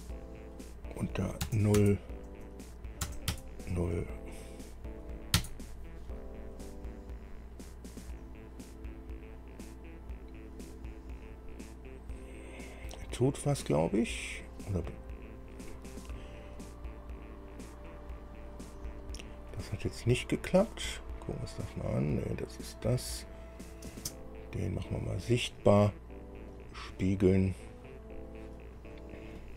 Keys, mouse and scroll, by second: 1.7 KP_0, 3.3 KP_0, 3.5 KP_Enter, 5.6 KP_Enter, 14.8 scroll down 2, 15.1 scroll up 2, 15.5 scroll down 2, 15.9 scroll up 2, 17.1 scroll down 2, 19.2 click, 19.7 click, 21.7 click, 22.2 click, 23.2 click, 24.1 space, 26.7 click.